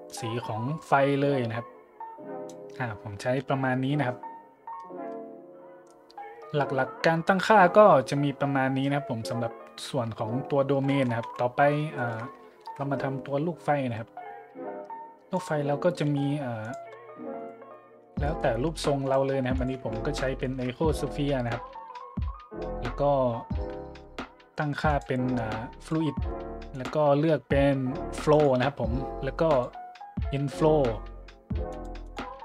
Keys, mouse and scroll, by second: 0.1-2.5 drag, 4.5 scroll down 1, 4.8 middle click, 5.1 scroll down 1, 7.1 middle click, 8.4 middle click, 9.3 middle click, 10.2 middle click, 10.9-11.2 drag, 11.2 `, 11.6 click, 12.0-12.4 shift+drag, 12.6 shift+a, 15.3 click, 16.0 g, 16.6 click, 16.9 s, 17.4-17.7 drag, 17.6 `, 18.2-18.6 shift+drag, 18.7 g, 19.0-19.4 drag, 19.2 s, 19.6-19.9 drag, 19.8 `, 20.4 shift+middle click, 21.5-21.8 shift+middle drag, 24.2 s, 24.9 click, 25.8-26.1 drag, 26.7 click, 28.3-28.7 drag, 29.5 click, 31.7-32.4 drag.